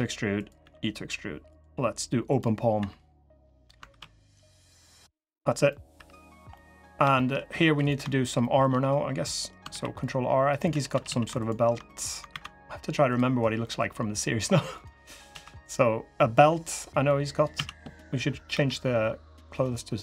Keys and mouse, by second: 2.5 e, 3.7 ctrl+r, 5.4 click, 5.7 3, 6.3 click, 6.9 shift+click, 8.2 shift+click, 9.0 click, 9.4 ctrl+r, 10.4 3, 10.7 a, 10.8 a, 11.6 click, 12.0 alt+e, 14.8 click, 15.0 3, 15.9 click, 16.8 click, 17.3 a, 18.3 g.